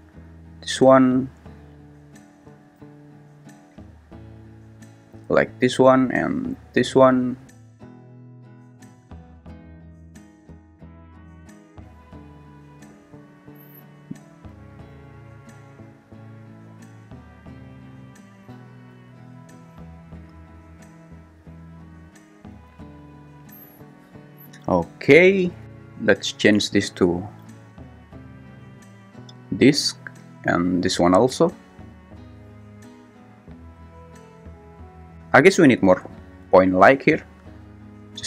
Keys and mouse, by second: 3.1 x, 5.2 x, 7.0-12.1 typing, 14.6 g, 14.9 z, 20.3 click, 28.3-29.5 drag, 33.3-35.1 drag.